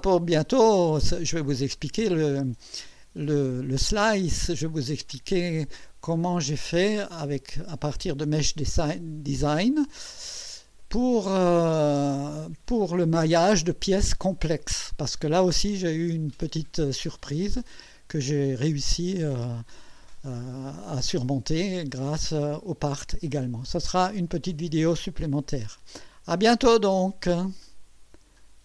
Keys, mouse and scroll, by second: 6.0 click, 7.1 click, 20.9 click.